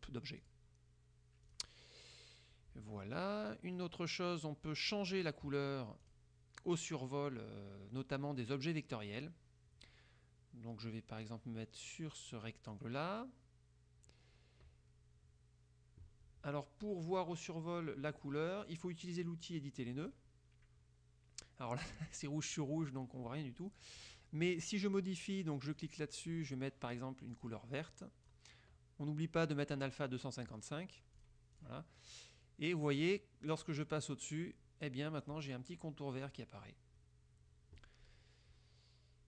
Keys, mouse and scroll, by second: 0.6 click, 1.6 click, 6.2 click, 12.8 click, 18.2 click, 20.2 click, 22.6 click, 25.8 click, 27.4 click, 27.8 click, 30.0 click, 31.4 click, 31.7 click.